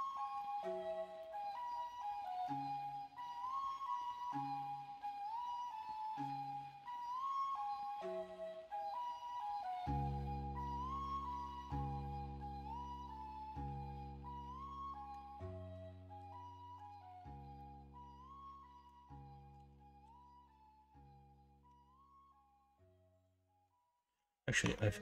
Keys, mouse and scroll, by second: 8.8-9.4 middle drag, 9.9-11.0 middle drag, 11.4-12.1 middle drag, 12.9-15.1 middle drag, 15.7 KP_1, 16.1 KP_3, 16.8 alt+z, 17.5-18.8 middle drag, 19.5 KP_1, 20.0 KP_3, 24.6 Tab.